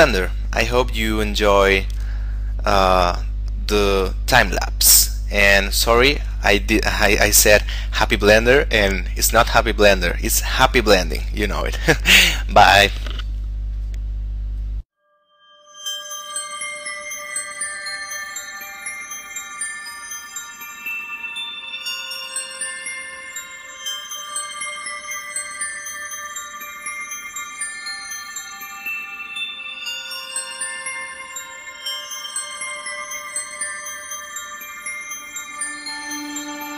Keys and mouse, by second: 14.2 click, 14.5 shift+middle click, 14.7 click, 15.1 x, 15.2 click, 15.3 shift+middle click, 15.4 s, 16.2 click, 16.3 right click, 16.8 click, 16.9 shift+middle click, 17.0 e, 17.2 click, 17.9 right click, 18.2 click, 18.9 click, 19.8 middle click, 19.9 click, 20.3 right click, 20.5 click, 20.7 shift+middle click, 21.2 right click, 21.3 middle click, 21.7 right click, 22.0 shift+middle click, 22.1 right click, 22.7 shift+middle click, 23.1 right click, 24.2 right click, 24.6 shift+middle click, 24.8 right click, 25.6 right click, 25.9 middle click, 26.3 click, 26.4 shift+middle click, 26.9 right click, 27.2 shift+middle click, 27.6 right click, 27.7 shift+middle click, 27.9 right click, 28.3 right click, 28.5 shift+middle click, 28.9 shift+middle click, 29.1 right click, 29.4 shift+middle click, 29.9 Tab, 30.0 right click, 30.2 click, 32.5 n, 32.6 click, 33.5 middle click, 33.9 click, 34.3 click, 35.9 shift+middle click, 36.1 click.